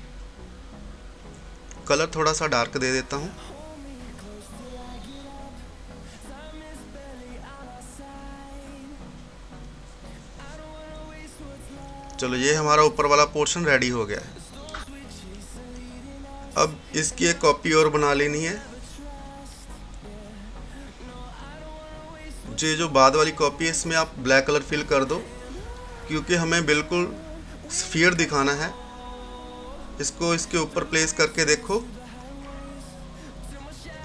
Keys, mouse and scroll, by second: 0.3-10.6 drag, 10.6-13.6 drag, 13.6 click, 14.1 scroll down 1, 15.2-16.6 scroll up 1, 16.6 click, 17.7 right click, 18.3 scroll down 1, 19.2 click, 20.7-21.3 scroll down 1, 21.3 scroll up 1, 22.8 click, 25.7 click, 26.9 scroll down 1, 27.6-32.1 drag, 32.1-33.5 drag, 33.5 scroll up 1.